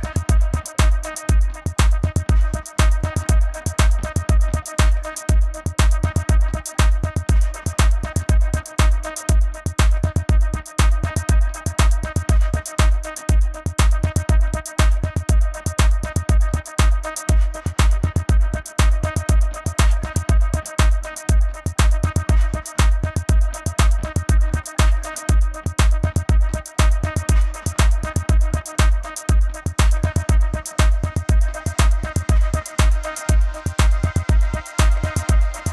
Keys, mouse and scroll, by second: 0.1 shift+click, 1.7 click, 2.0 space, 2.1 click, 3.3 alt+shift+click, 4.3 click, 5.7 click, 6.2 alt+click, 7.3 space, 7.5 click, 9.5 shift+click, 9.8 click, 10.7 shift+click, 11.8 space, 11.9 click, 14.5 click, 15.9 shift+click, 16.4 click, 16.5 space, 16.5 click, 16.7 ctrl+=, 16.8 click, 17.8-18.4 typing, 18.6 click, 20.0 click, 20.9 click, 21.0 click, 21.8 click, 22.6 click, 23.5 click, 24.6 click, 25.4-26.0 typing, 25.6 click, 26.3 click, 27.1 click, 27.5 click, 28.3 Left, 29.0 click, 29.0 Left, 29.5 click, 29.6 space, 29.7 click, 29.8 space, 30.0 a, 30.0 space, 30.1 click, 31.1 space, 31.5 click, 31.6 space, 34.9 click, 35.4-35.7 typing, 35.4 click.